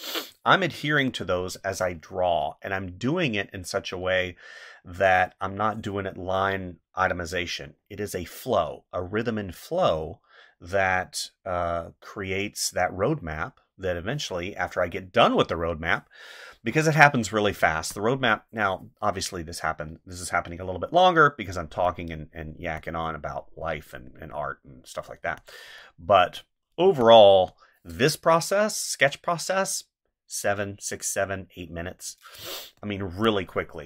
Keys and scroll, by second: 0.7 space, 17.6 space, 22.6 space, 25.2 space, 26.8 space, 32.4 space.